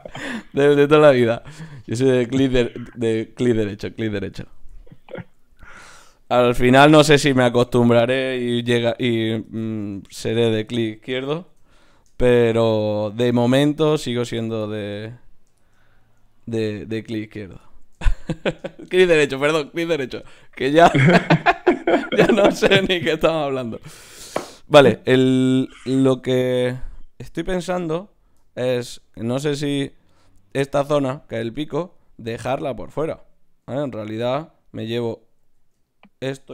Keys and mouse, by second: 5.6-7.3 right drag, 5.8 click, 6.4 g, 8.6 ctrl+r, 9.8 ctrl+Tab, 10.6 click, 11.4 f, 11.6 f, 11.8 click, 14.0 ctrl+Tab, 17.3-19.4 right drag, 19.4 g, 20.2 click, 20.4 g, 21.4 g, 22.5 g, 33.7 Tab, 34.6 click, 35.4 z.